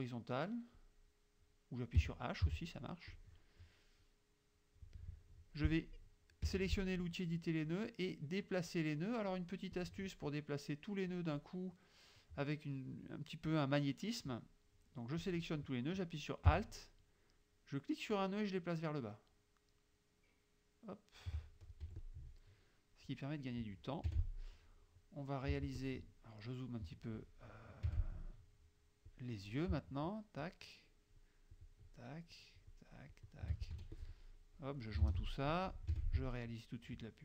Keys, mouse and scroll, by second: 0.8 click, 2.1 h, 3.2-5.0 drag, 6.5 F2, 9.8-11.4 drag, 15.3 click, 18.2-21.4 alt+drag, 21.9 F1, 22.0 click, 24.2 F6, 25.6 z, 25.8 click, 27.9 F6, 29.1 click, 30.5 shift+click, 31.6 shift+click, 32.4 shift+click, 33.2 shift+click, 33.8 shift+F2, 34.0 shift+click, 35.1 shift+j, 36.0 F6, 37.0 click.